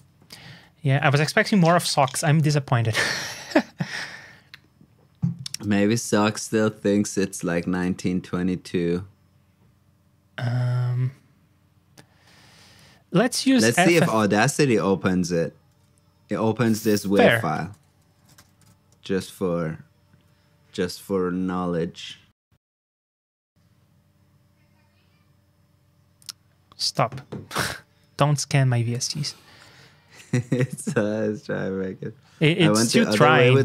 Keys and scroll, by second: 30.2 ctrl+alt+super+s.